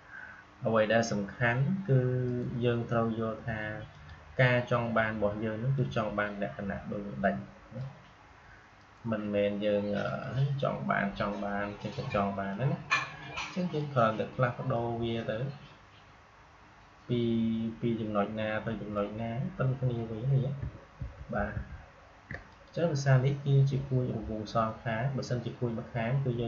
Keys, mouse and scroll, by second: 2.2 right click, 3.8-8.7 drag, 8.7 right click, 9.9 click, 12.4-20.9 drag, 20.9 ctrl+z, 22.4 click.